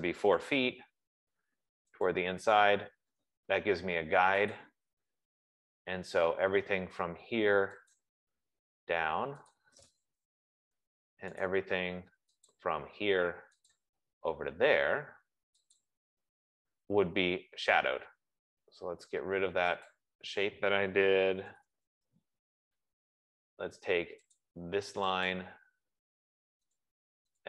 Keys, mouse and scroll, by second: 0.0-0.6 typing, 0.1 click, 1.9-3.0 typing, 2.5 click, 5.1 click, 8.2 click, 11.9 Return, 11.9 right click, 12.9 click, 14.2 click, 16.1 click, 20.3 click, 21.5-22.6 typing, 24.7 click, 25.6 click, 27.1 click.